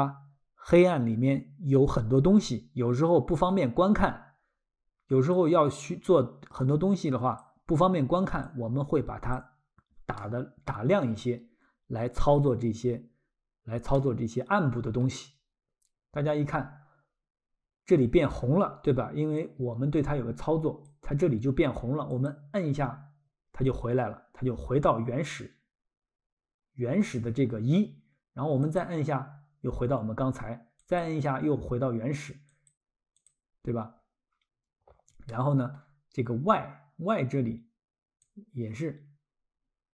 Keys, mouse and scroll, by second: 5.3 click, 8.4 click, 10.2 middle click, 11.0-11.5 scroll, 13.9 middle click, 19.4 click, 22.1 click, 28.6 click, 30.8 click, 32.5 click, 34.9 scroll, 35.3 middle click, 38.3 click.